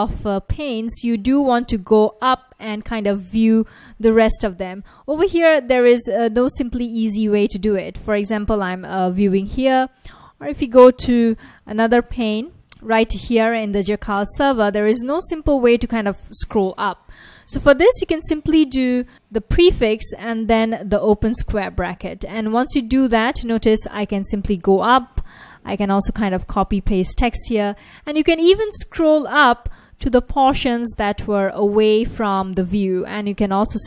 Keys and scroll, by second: 5.5 Up, 5.6 Up, 6.4 Up, 6.6 Up, 6.8 Up, 8.1 F1, 9.1 F1, 11.4 ctrl+a, 11.4 o, 12.6 ctrl+a, 13.4 F1, 15.1 Page_Up, 15.3 Page_Up, 15.6 Page_Up, 15.8 Page_Up, 19.7 ctrl+a, 20.4 [, 22.1 Page_Up, 23.3-25.1 typing, 27.2 Up, 27.4 Up, 27.5 Up, 27.8 Up, 28.0 Up, 28.1 Up, 28.3 Up, 29.1 Up, 29.4 Up, 29.6 Up, 30.8 Up, 31.2 Up, 31.9 Up, 32.6 Down, 33.1 Down, 33.7 Down.